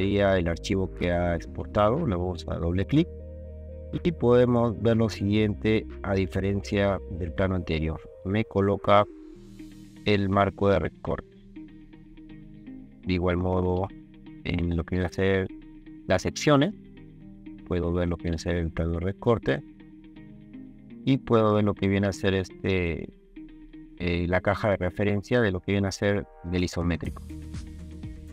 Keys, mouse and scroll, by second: 0.0 ctrl+click, 1.6 ctrl+click, 1.8 ctrl+click.